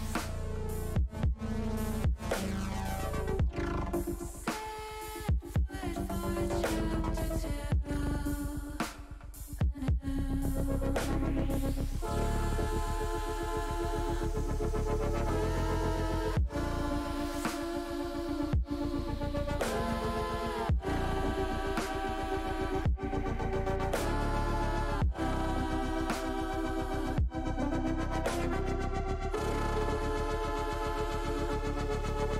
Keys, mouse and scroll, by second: 0.7 click, 4.2 click, 6.1 click, 7.7-9.1 middle drag, 9.9 shift+middle click, 11.1 click, 12.0 click, 13.5 click, 14.2 click, 16.3 ctrl+b, 28.7 click, 31.6 click.